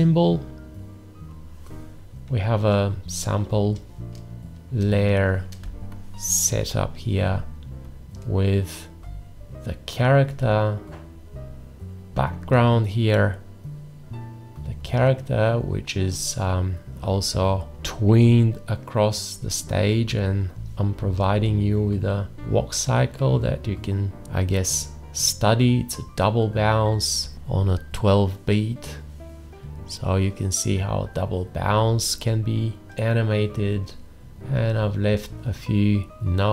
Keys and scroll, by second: 5.7 ctrl+space.